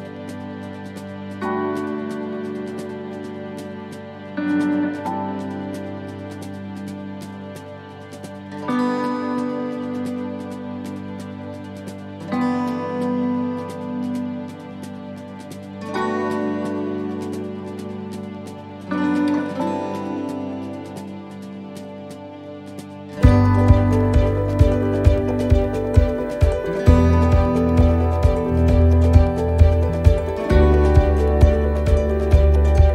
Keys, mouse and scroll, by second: 1.7 middle click, 4.4 shift+d, 5.9 click, 8.0 click, 9.4 middle click, 16.7 middle click, 18.0 click, 21.3 click, 24.2 middle click, 25.9 click, 28.2 middle click, 30.5-31.8 scroll down 2, 30.8 middle click, 32.0 shift+middle click, 32.4-32.9 scroll up 3, 32.8 middle click.